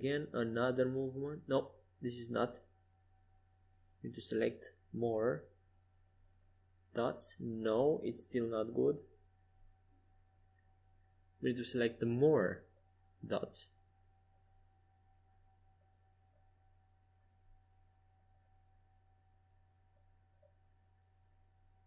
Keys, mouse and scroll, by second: 0.6 g, 3.8 c, 7.5 g, 11.0 a, 12.4 c, 19.4 g.